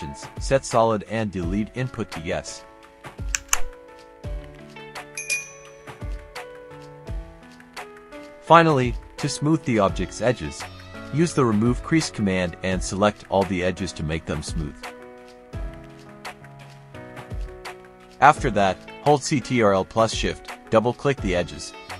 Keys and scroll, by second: 4.3 KP_0, 4.5 KP_Decimal, 4.8 KP_2, 5.1 Return, 9.9-12.0 typing, 13.1-14.0 typing, 16.1 space.